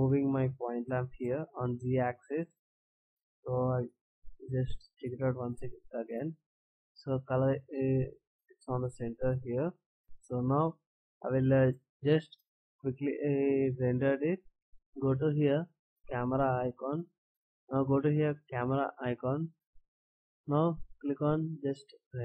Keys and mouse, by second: 0.5 click, 3.7 KP_0, 4.8 shift+z, 14.7 click, 17.3 click.